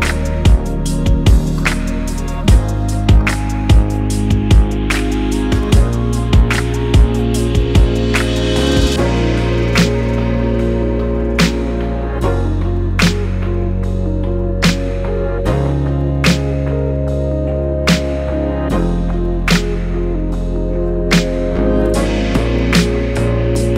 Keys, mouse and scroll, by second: 0.2-1.7 shift+middle drag, 0.3-0.8 scroll up 2, 1.4 g, 1.7 click, 1.8 KP_0, 3.8 z, 3.9-4.3 scroll down 2, 4.1 click, 4.3 middle click, 4.5-5.3 scroll up 3, 5.0 click, 5.3 middle click, 5.8 click, 5.9 z, 6.4 Tab, 6.6-9.1 shift+middle drag, 7.4 KP_0, 7.7 z, 9.1 click, 9.6-12.1 shift+middle drag, 12.1-13.6 drag, 13.6 KP_0, 14.3 scroll up 1, 20.9-23.7 drag.